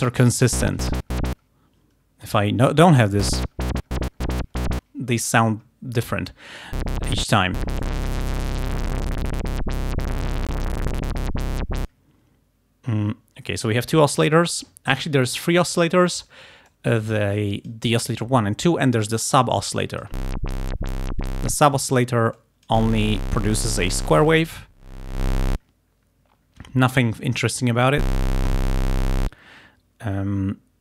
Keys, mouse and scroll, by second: 2.3 middle click, 6.1 click, 7.9 click, 10.3-12.1 drag, 16.7-17.9 drag, 19.8 click, 22.4 click, 24.1-25.8 drag.